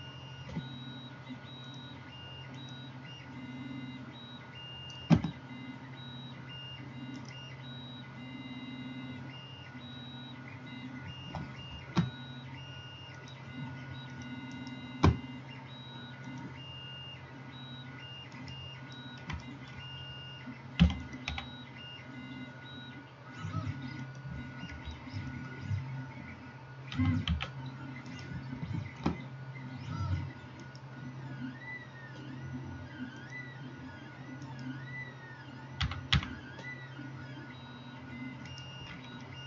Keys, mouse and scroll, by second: 0.0-1.7 drag, 0.0 x, 1.7-2.7 middle drag, 2.7-14.3 drag, 14.3-16.3 middle drag, 16.3-21.2 drag, 18.5 middle click, 18.5 right click, 20.8 e, 21.2-30.7 middle drag, 21.4 s, 27.0 s, 30.7 right click, 30.9-33.2 middle drag, 33.2-39.4 drag, 34.5 middle click, 34.5 right click, 35.8 g.